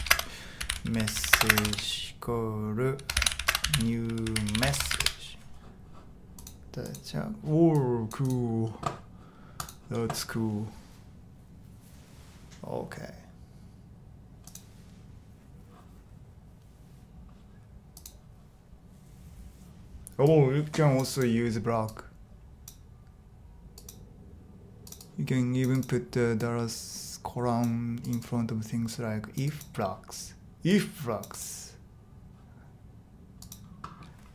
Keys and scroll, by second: 0.0-5.5 typing.